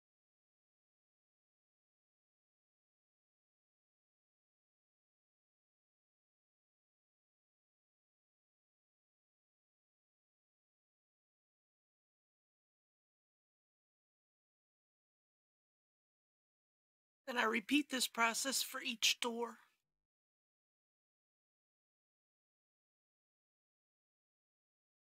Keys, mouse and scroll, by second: 2.0 click, 8.1 KP_Decimal, 8.3 KP_0, 8.6 KP_5, 9.4 Tab, 11.0 KP_1, 11.2 KP_5, 11.6 Tab, 12.9 KP_Decimal, 13.2 KP_5, 16.1 click, 16.6 Tab, 21.1 click, 21.3 middle click, 21.7 click, 22.2 Tab, 22.6 click, 22.9 Tab, 23.1 click, 23.6 middle click, 23.7 shift+click, 24.0 shift+click, 24.2 middle click, 24.6 shift+click, 24.8 middle click.